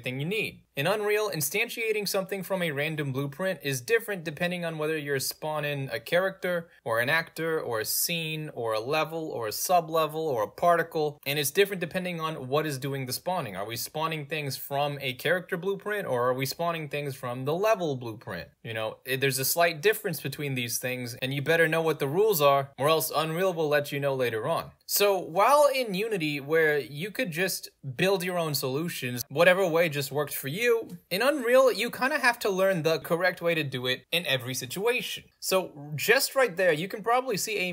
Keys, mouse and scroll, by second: 24.7 click.